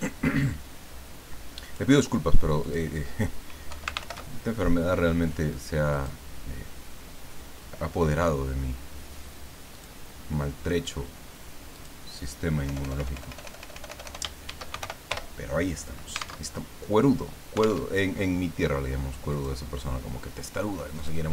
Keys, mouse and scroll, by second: 1.6 click, 2.6 click, 3.7 Home, 4.0 ctrl+shift+End, 5.9 click, 9.7 click, 11.7 click, 12.7 BackSpace, 14.2-15.3 typing, 16.4 alt+Tab, 17.8 alt+Tab, 19.3 click, 21.0 click.